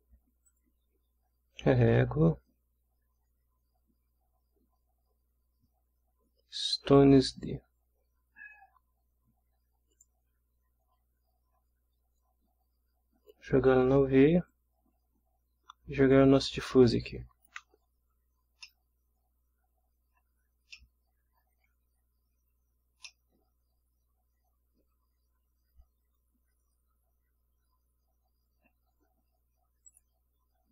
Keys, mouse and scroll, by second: 0.5 click, 7.3 click, 9.9 click, 12.2-13.5 drag, 14.5-16.3 drag, 16.9-17.6 drag, 18.2 scroll up 3, 18.6-19.6 ctrl+middle drag, 20.7 ctrl+middle click, 20.9 ctrl+scroll up 2, 23.0-26.0 middle drag, 26.0 scroll down 1, 26.2-29.9 scroll up 1, 29.9 click.